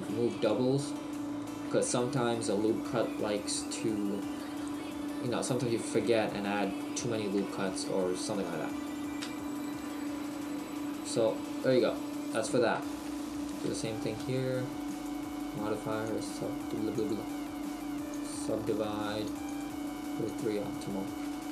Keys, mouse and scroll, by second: 6.8 shift+middle click, 9.8 middle click, 13.2 right click, 13.7 Tab, 16.0 Tab, 16.0 click.